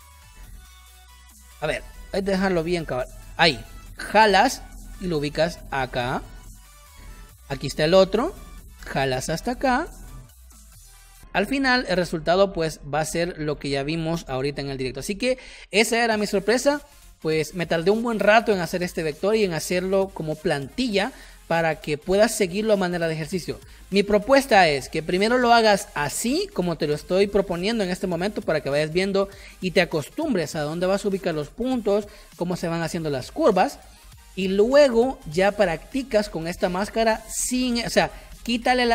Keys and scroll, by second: 1.5 ctrl+z, 6.6 space, 12.4 space, 12.8 v, 14.1 Delete, 14.9 space.